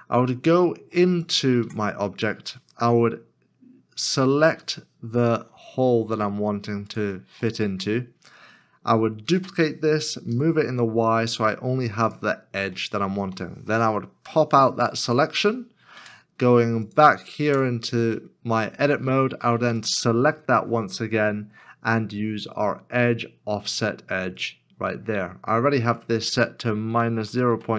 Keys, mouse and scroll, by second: 0.4 scroll up 1, 1.6 Tab, 4.6 alt+click, 5.6 alt+s, 6.9 alt+shift+click, 7.8-8.3 scroll down 1, 8.5 middle click, 9.2 shift+d, 12.8 shift+middle click, 14.3 p, 16.9 Tab, 19.8 alt+click, 26.9-27.7 typing.